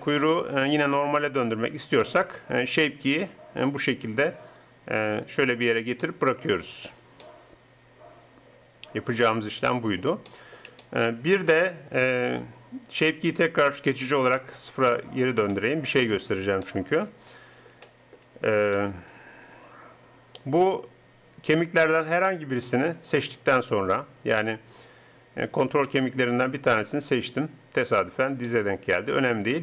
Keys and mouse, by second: 9.0-10.4 middle drag, 14.1-16.1 middle drag.